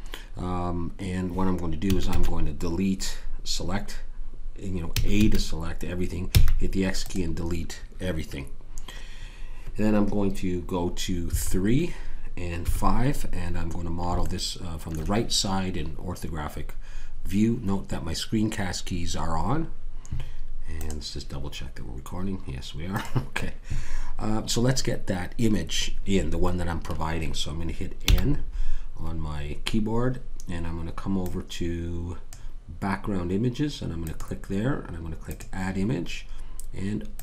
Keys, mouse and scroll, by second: 1.9 a, 2.1 a, 4.9 a, 5.1 a, 6.3 x, 11.3 KP_3, 12.7 KP_5, 14.4 middle click, 28.0 n, 31.2-37.2 drag.